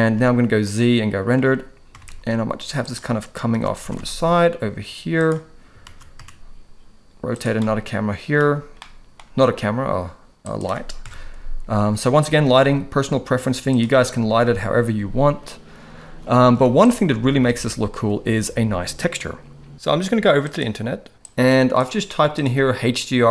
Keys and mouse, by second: 0.1 z, 1.9 r, 3.5 shift+d, 5.8 shift+d, 7.6 middle click, 8.8-9.1 middle drag, 9.6 g, 11.0 KP_0, 12.5 r, 16.0 ctrl+s, 16.5 z, 17.5 ctrl+s.